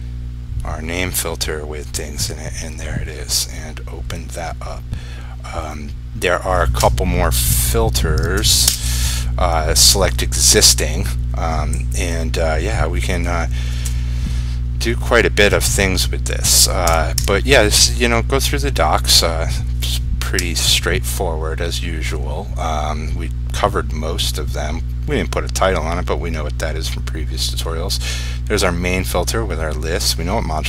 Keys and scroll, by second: 8.8 ctrl+space, 20.7 F1.